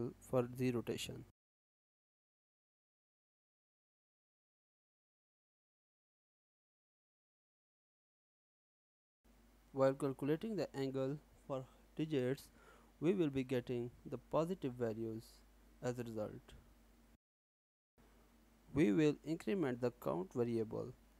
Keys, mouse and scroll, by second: 3.7 click, 6.1 n, 9.3 click, 9.5 click, 10.5 click, 11.1 shift+3, 11.5 space, 11.5 1, 12.6-17.0 typing, 17.6 alt+s, 18.2 Return, 19.4-21.1 typing.